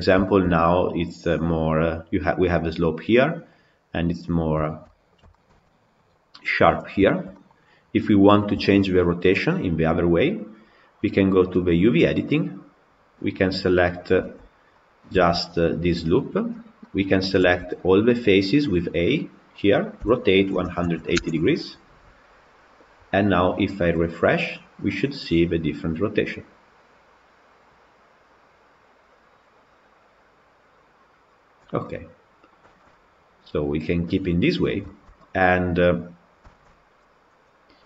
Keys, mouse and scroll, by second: 6.5-6.9 scroll down 3, 6.9-7.4 shift+middle drag, 7.4-8.0 scroll down 2, 8.0-8.4 scroll up 3, 8.4-9.0 shift+middle drag, 9.0 scroll up 2, 11.6 click, 13.0 click, 14.0 Tab, 14.7 click, 15.2 Tab, 17.2 a, 20.1 r, 24.0 click, 24.7 middle click, 25.4 click, 31.7-34.0 middle drag, 34.0-34.3 scroll up 1, 34.3-34.7 scroll down 2, 34.7-37.8 shift+middle drag.